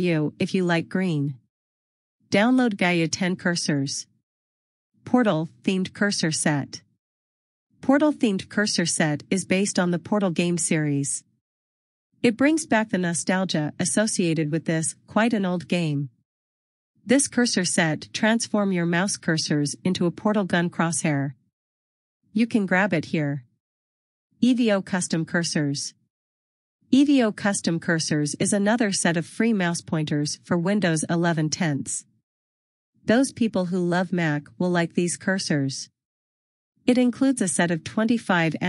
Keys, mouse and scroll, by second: 7.5 click, 9.8 click, 13.4 click, 28.4 click.